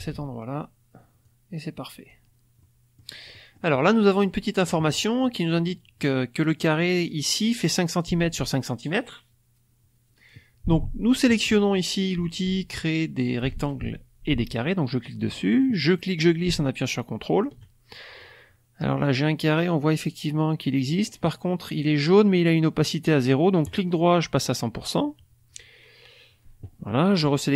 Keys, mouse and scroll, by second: 1.2-2.2 drag, 2.5 middle click, 3.3-4.5 middle drag, 3.8-4.5 scroll up 1, 4.9 click, 5.5 click, 14.9 click, 15.9-17.5 drag, 23.6 right click, 24.3 click.